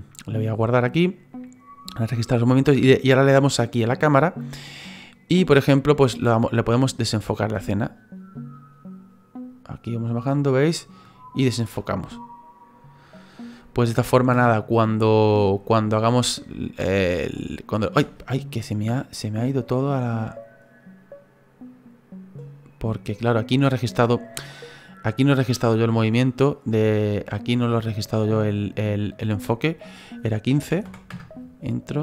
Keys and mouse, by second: 0.6 click, 3.7 click, 5.6 click, 16.8 space, 18.0 space, 19.6 click, 25.3 click, 28.1 click, 29.8 click, 30.7 KP_1, 30.9 KP_5, 31.1 Return.